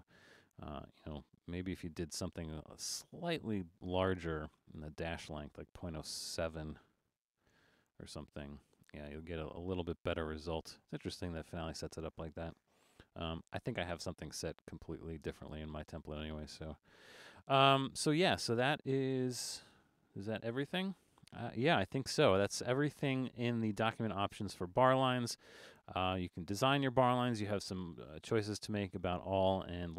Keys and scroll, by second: 1.0 alt+super+a, 7.2 7, 13.4 alt+super+a, 17.7 super+z, 19.2 alt+super+a.